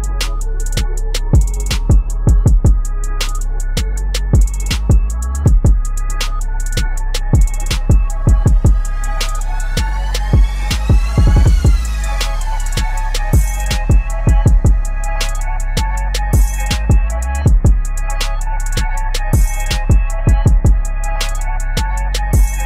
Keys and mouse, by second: 0.1 v, 0.3-2.8 drag, 2.8 ctrl+t, 3.0 ctrl+right click, 4.5-7.1 drag, 7.1 ctrl+t, 7.3-10.6 drag, 10.6 shift+Down, 10.8 Right, 15.1 right click, 16.1 click, 16.7 right click, 17.4 click, 20.0 click, 20.1 u, 20.7 click.